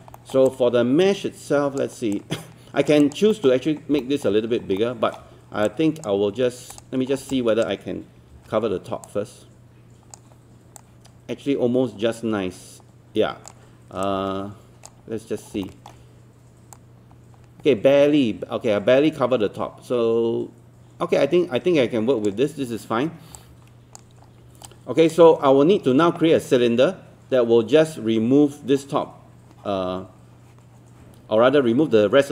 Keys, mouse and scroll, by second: 0.2 alt+middle click, 0.5 alt+click, 2.1 alt+click, 3.0 alt+click, 3.3 alt+middle click, 4.0 alt+middle click, 4.5 scroll down 1, 4.8 alt+middle click, 5.7 alt+click, 6.7 click, 7.1 scroll down 1, 7.3 alt+click, 8.3 w, 9.1-15.3 drag, 15.3 scroll up 1, 15.7 alt+middle click, 16.7-24.3 drag, 24.3 scroll down 1, 24.7 alt+click, 25.3 scroll up 1.